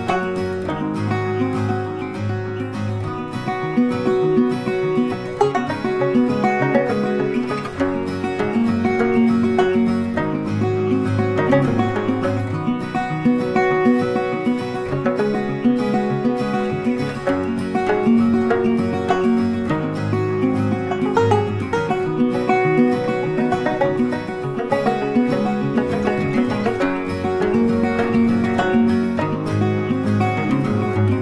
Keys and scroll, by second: 12.4 Delete, 14.2 ctrl+d.